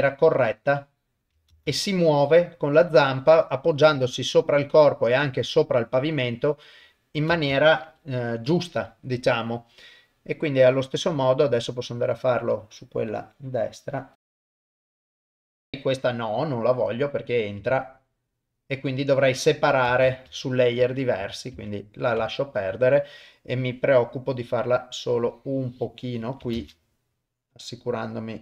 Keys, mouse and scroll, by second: 0.0-1.1 drag, 1.5 shift+space, 7.3 shift+space, 8.3 shift+Left, 11.7 click, 13.2 click, 14.2 click, 14.5 click, 14.8 click, 15.1 ctrl+z, 15.3 click, 15.5 shift+space, 19.9 shift+space, 20.8 ctrl+z, 21.2 ctrl+z, 21.6 ctrl+z, 25.2-26.2 drag, 26.6 shift+space.